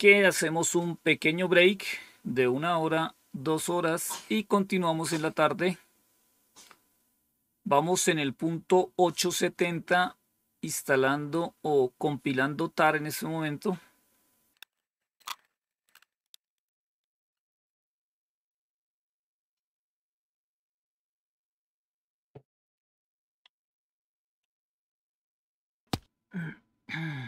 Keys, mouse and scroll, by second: 14.6 click, 25.7 click.